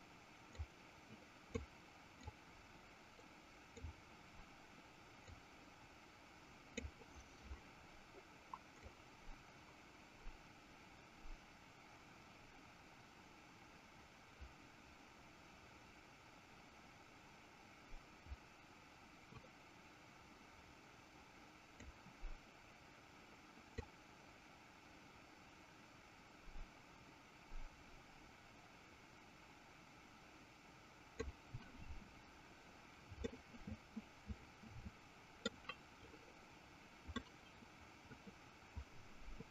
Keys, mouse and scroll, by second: 0.5-2.0 drag, 2.5-4.6 drag, 5.7-7.5 drag, 8.9-23.0 drag, 24.0-31.7 drag, 33.6-35.7 middle drag, 37.6-39.5 middle drag.